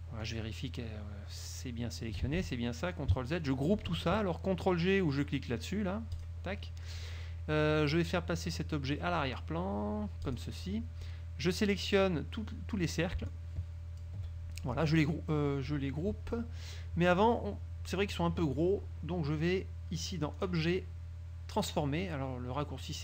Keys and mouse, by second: 0.4-2.3 drag, 6.3 click, 10.4 click, 12.2-13.1 drag, 13.4-14.3 shift+drag, 20.5 click.